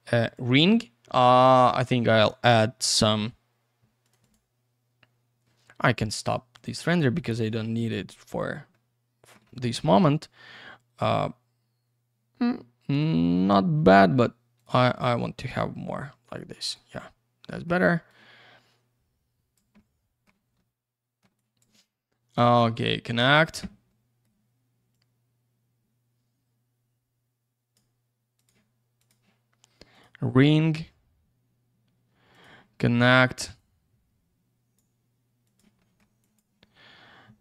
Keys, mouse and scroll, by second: 0.2 click, 2.1 click, 4.0 click, 4.2 click, 4.3 double click, 6.0 click, 6.5 click, 7.0 middle click, 8.1-8.6 scroll down 1, 8.7 alt+middle click, 9.4 middle click, 9.7 alt+middle click, 14.5 click, 14.8 double click, 14.9 click, 15.4 click, 15.5 double click, 16.6 click, 17.0 alt+middle click, 18.1 click, 20.6 alt+middle click, 21.3 click, 23.2 click, 23.9 alt+middle click, 24.9 click, 28.3 click, 29.0 click, 29.9 click, 32.3 click, 33.6 click, 35.4 click, 35.8 middle click, 36.0 double middle click, 36.2 click.